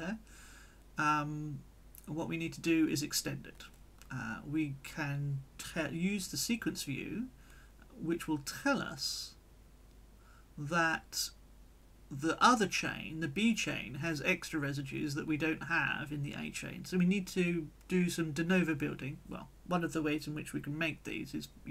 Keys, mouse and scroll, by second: 1.8 right click, 5.6 click, 8.9 click, 12.6-13.9 drag, 14.3-15.3 drag.